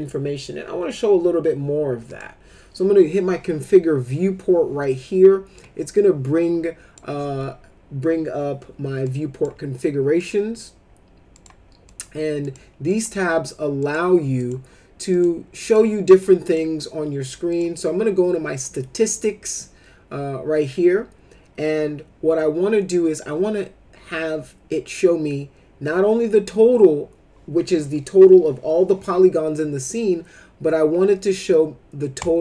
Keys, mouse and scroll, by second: 2.1 click, 5.5-6.9 drag, 9.0 click, 10.2 click, 11.3 click, 11.9 click, 12.4 click, 12.9 click, 13.8 click, 14.3 click, 15.1 click, 15.6 click, 16.1 click, 16.5 click, 17.5 click, 32.2 click.